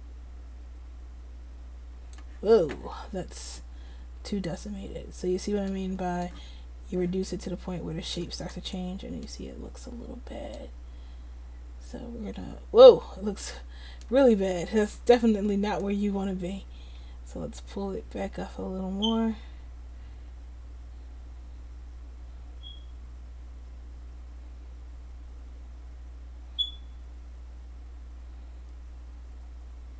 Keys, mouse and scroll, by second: 12.2-13.7 drag.